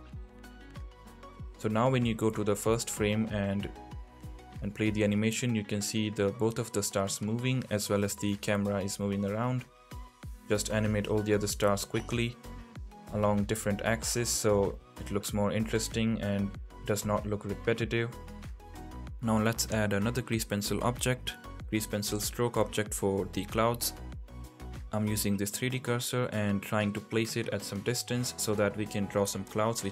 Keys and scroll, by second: 0.8 space, 7.8 space, 10.5 k, 12.2-15.0 typing, 16.1 k, 17.4-18.7 typing, 19.8 space, 21.3 shift+a, 23.1 g.